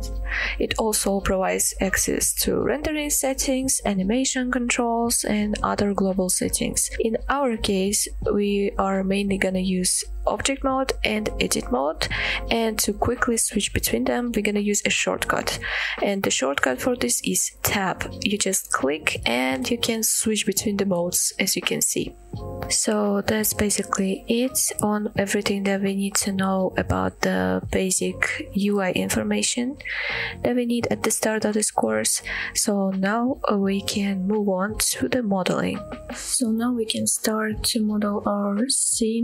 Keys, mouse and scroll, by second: 10.6 scroll down 1, 11.1-11.5 middle drag, 11.7-12.1 middle drag, 13.8 click, 15.4-15.7 scroll up 1, 15.9 shift+middle drag, 16.6-17.2 middle drag, 17.5-17.8 shift+middle drag, 18.7 Tab, 23.0-23.7 middle drag, 23.9-24.3 middle drag, 28.6-29.1 shift+middle drag, 29.9-30.5 middle drag.